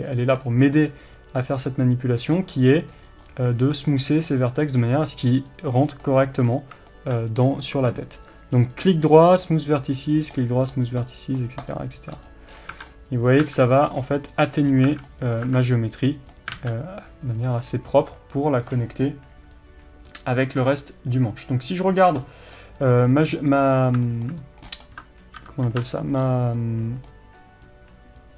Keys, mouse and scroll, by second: 3.3 right click, 3.6 scroll up 1, 4.1-9.5 middle drag, 5.9 scroll down 1, 7.3-7.7 scroll up 1, 9.5-12.9 right drag, 12.6 scroll down 1, 12.8 Tab, 12.9-20.7 middle drag, 13.5 Tab, 14.7 scroll up 1, 14.9 Tab, 15.4 scroll up 1, 15.5 Tab, 16.6 alt+a, 21.4-28.3 middle drag, 24.7-25.2 scroll down 1, 25.4 ctrl+KP_7, 26.3 scroll up 1.